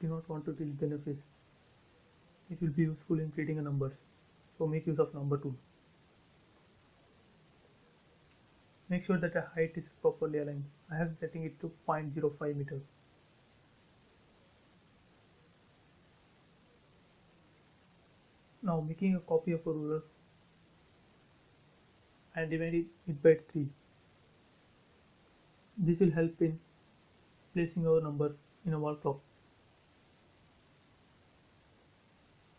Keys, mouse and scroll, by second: 0.5-1.0 scroll down 1, 2.9 scroll up 1, 3.5 click, 5.0 space, 10.1 click, 11.8 t, 12.2 space, 12.6 click, 13.4 shift+click, 14.3 q, 15.4 click, 18.8 click, 19.7-21.1 typing, 20.6 Return, 22.1 click, 22.6 scroll up 1, 24.0 click, 26.6 typing, 27.6 click, 27.7 click, 28.4-29.2 scroll up 1, 30.9 click, 31.0 space, 31.2 scroll down 1, 31.5-32.5 middle drag.